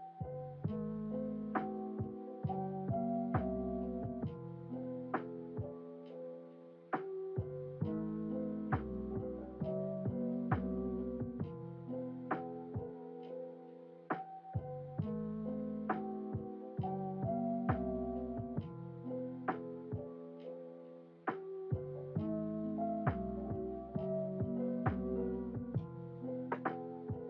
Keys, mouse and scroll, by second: 4.1 e, 8.7 KP_1, 12.5-13.5 drag, 17.1 scroll down 2, 17.6-18.3 scroll up 3, 18.5 scroll down 1, 21.1 click, 22.5 click, 24.3 ctrl+z, 24.8 ctrl+z.